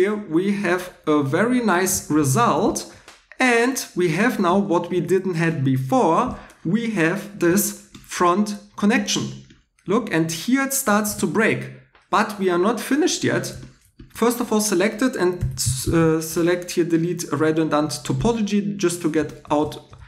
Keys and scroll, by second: 11.0 shift+e, 14.1 Tab, 15.1-16.5 typing.